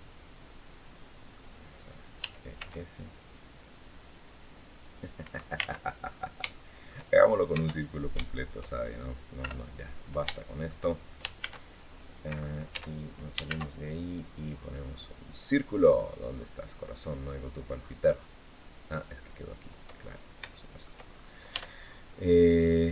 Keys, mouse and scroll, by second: 1.9 e, 2.3 s, 4.9 Escape, 5.3 ctrl+z, 5.8 ctrl+scroll down 3, 6.2 shift+click, 6.9 shift+scroll up 3, 7.4 shift+scroll down 2, 8.0 shift+click, 9.1 KP_7, 9.6-9.9 scroll down 1, 10.1 shift+click, 11.1 shift+a, 12.0 Escape, 12.4 Tab, 13.2 shift+a, 15.0 click, 15.7 scroll down 1, 16.6-17.2 scroll down 4, 17.5 scroll up 2, 18.7 click, 19.7-20.1 scroll up 2, 20.2 shift+middle click, 21.3 Tab.